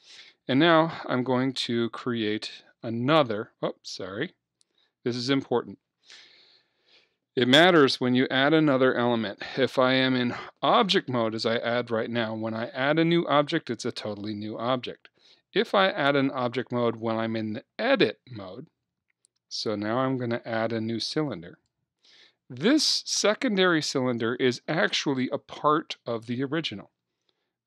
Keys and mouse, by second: 2.7 shift+a, 12.9 Tab, 13.5 Tab, 16.4 Tab, 19.9 shift+a.